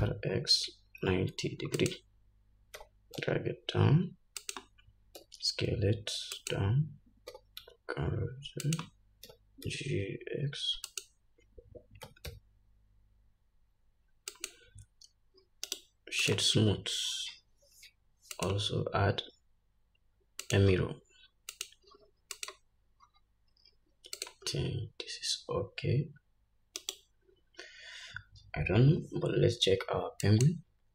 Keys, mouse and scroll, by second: 0.0 r, 3.1 g, 5.5 s, 7.6 r, 9.6 g, 12.4 g, 16.0-27.3 right drag, 18.7-22.0 drag, 23.3-24.0 scroll down 2, 24.5 click, 24.5 scroll down 1.